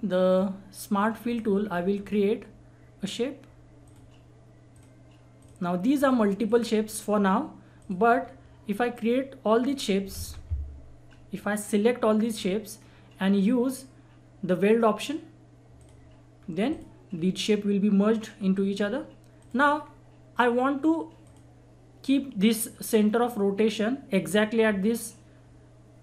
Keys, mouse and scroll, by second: 2.0 scroll up 1, 3.8 click, 6.8 scroll down 1, 7.8 click, 8.2 scroll down 1, 8.9 click, 9.0 click, 10.1 ctrl+z, 11.3-12.7 drag, 12.7 scroll up 1, 15.8 click, 16.3-16.7 scroll down 1, 16.7 click, 17.1-18.3 scroll up 1, 18.3-18.7 scroll down 1, 18.8 scroll up 1, 19.4 click, 19.8 scroll down 1, 21.2 click.